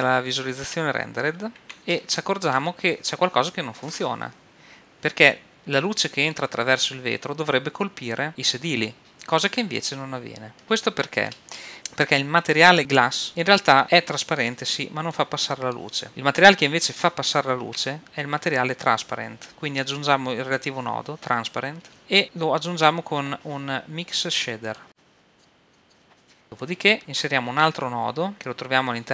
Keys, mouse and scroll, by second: 10.6-11.7 middle drag, 11.7-13.3 right drag, 13.4-16.1 drag, 17.6 shift+a, 20.7-22.2 drag, 22.2 shift+a, 25.8 click, 26.6 click, 27.0 right click, 27.5 click, 27.5 shift+a.